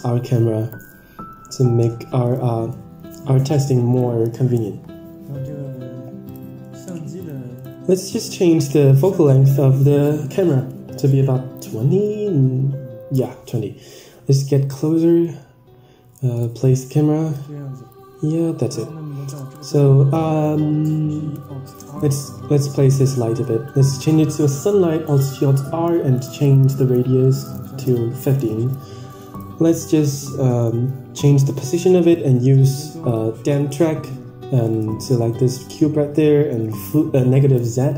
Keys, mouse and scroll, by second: 6.2 click, 7.1 click, 8.1 n, 9.2 click, 9.7-11.2 drag, 12.4 shift+`, 19.4 click, 21.3 alt+g, 23.0 click, 23.6-25.8 drag, 26.1 middle click, 26.3 scroll down 5, 27.1 middle click, 27.1-27.9 scroll down 15, 27.6 middle click, 28.2 g, 30.0-32.6 drag, 33.0 click, 34.6 click, 35.2 g, 37.3 KP_0.